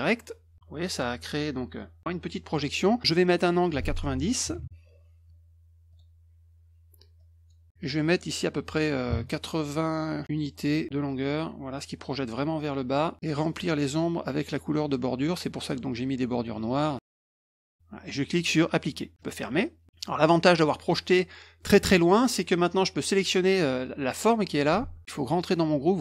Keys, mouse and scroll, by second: 3.5 click, 5.9 click, 7.2 click, 10.3 click, 19.2 click, 19.8 middle click, 22.7 click, 23.8 click, 24.8 ctrl+z.